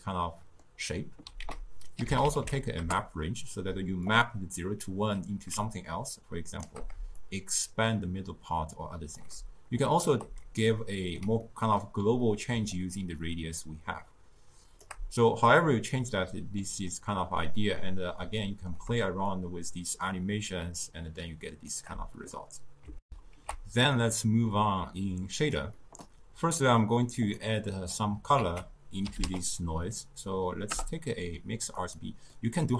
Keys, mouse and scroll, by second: 1.5 ctrl+a, 5.8-10.3 shift+drag, 10.7-12.8 ctrl+middle drag, 12.8-15.9 shift+drag, 16.3-19.4 middle drag, 19.4-22.4 shift+drag, 23.1 ctrl+alt+shift+q, 25.0 click, 25.8-27.3 middle drag, 27.3 click, 27.6 click, 28.4 ctrl+a, 32.3-32.7 middle drag.